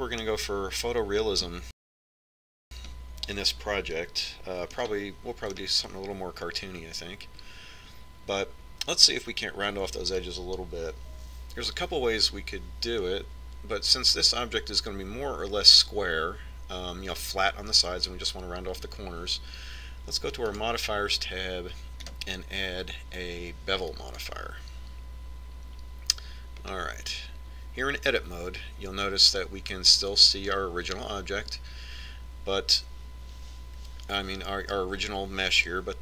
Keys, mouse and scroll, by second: 0.8-2.7 middle drag, 3.4-5.6 middle drag, 5.8-7.6 middle drag, 21.6-26.0 drag, 27.6-29.7 middle drag.